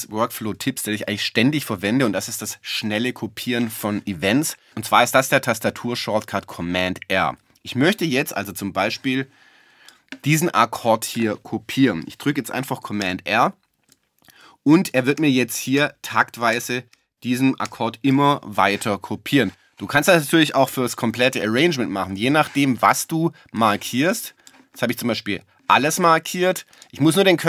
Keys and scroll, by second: 13.0 super+r, 15.2 super+r, 20.7 BackSpace.